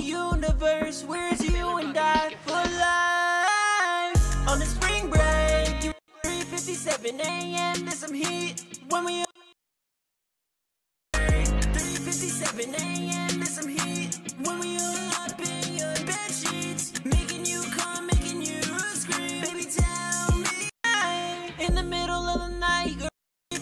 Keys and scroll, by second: 8.6 space, 18.9 super+s.